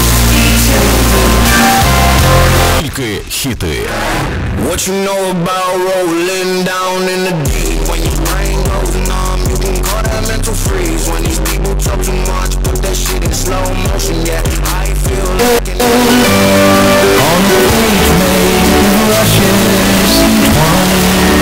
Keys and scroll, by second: 2.8 Page_Down.